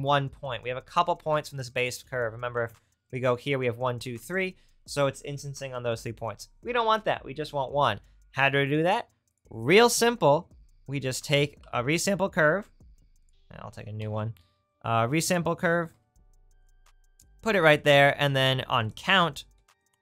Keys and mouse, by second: 2.6 Tab, 4.2 Tab, 11.6 shift+d, 14.0 ctrl+z, 14.5 shift+a, 19.0 click.